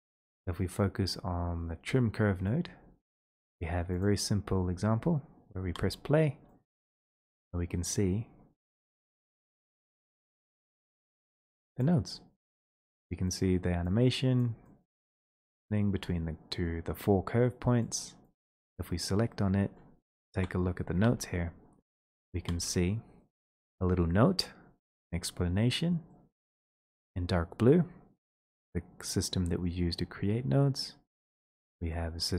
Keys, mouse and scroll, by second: 1.1 click, 1.4-2.6 scroll, 2.7 scroll, 3.3 click, 4.0 click, 4.0 middle click, 7.0 right click, 7.1 click, 7.2 click, 7.7-8.5 scroll, 9.9 click, 10.9 scroll, 11.3 middle click, 11.9 click, 14.4 click, 15.0 right click, 15.3 middle click, 15.4 middle click, 15.6 middle click, 16.2 middle click, 16.4 scroll, 17.8 click, 18.4 right click, 19.3-19.6 scroll, 20.3 Home, 21.0 ctrl+space, 21.6-22.5 scroll, 23.3-23.8 scroll, 23.5 middle click, 26.2 middle click, 27.1 click, 29.4 middle click, 29.4 middle click, 29.5 middle click, 30.1 middle click, 30.6 middle click.